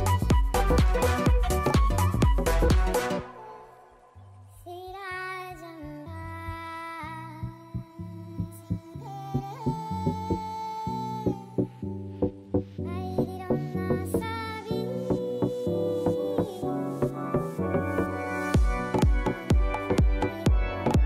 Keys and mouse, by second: 1.1 BackSpace, 1.3 BackSpace, 2.0 KP_5, 2.2 Return, 7.0 click, 15.3 click, 16.0 click, 18.6 click, 19.2 click, 20.4 click.